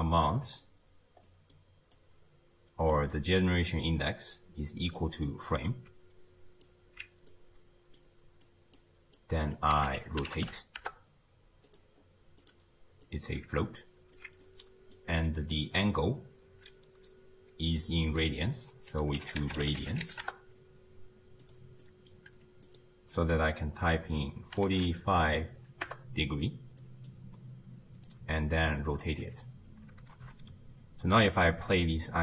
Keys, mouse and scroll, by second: 2.0 click, 3.1 middle click, 3.6-5.0 scroll up 2, 5.0 click, 7.3-8.5 middle drag, 8.5 click, 9.2 drag, 12.0-12.4 scroll up 1, 12.4-13.9 drag, 13.9-14.4 alt+right drag, 14.4-15.6 middle drag, 15.6 click, 17.8 drag, 21.9 middle click, 22.7-25.8 drag, 26.8-28.1 middle drag, 28.1 drag, 30.1 shift+space, 31.7 space.